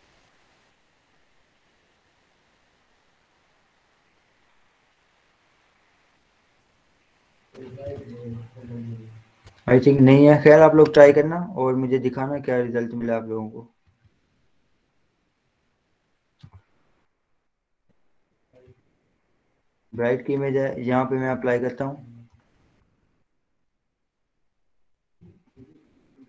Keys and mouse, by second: 10.4 click, 16.8 ctrl+0, 18.2 ctrl+j, 18.4 z, 19.0 click, 22.5-23.8 typing, 25.4 ].